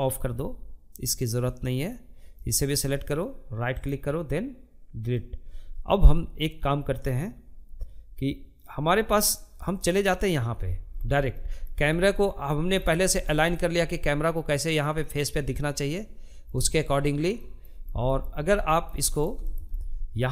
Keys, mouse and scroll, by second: 2.1-4.6 right drag, 4.6-7.7 drag, 7.7-8.9 middle drag, 8.9-9.7 scroll up 7, 9.7-11.1 shift+middle drag, 11.1-11.6 scroll down 5, 11.6-16.2 shift+middle drag, 16.2 scroll down 1, 16.5 shift+middle click, 16.8-17.5 scroll up 3, 17.1 shift+middle click, 17.5-19.4 middle drag, 19.4-19.9 scroll up 2, 19.9-20.3 shift+middle drag.